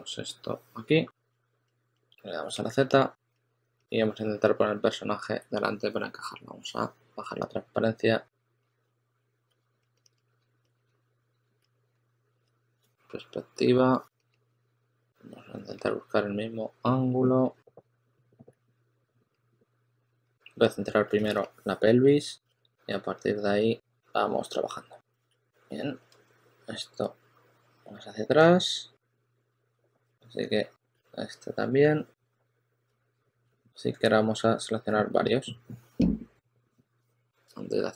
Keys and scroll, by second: 2.0 z, 2.3 s, 6.1 z, 9.0-9.9 typing, 11.3-12.2 typing, 18.1-18.9 typing, 21.2 shift+super+a, 21.7 shift+super+a, 22.3 shift+super+x, 24.8-25.9 typing, 29.1-30.5 typing, 32.8 super+z, 32.9 super+z, 33.3-34.8 typing.